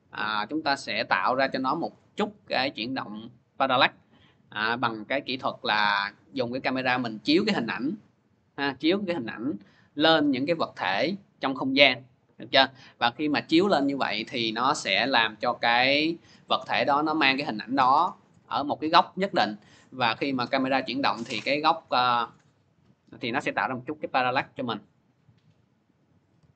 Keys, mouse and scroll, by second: 17.3 click, 19.6 click, 21.3 click, 22.6 click, 25.4 click, 26.0-26.5 typing.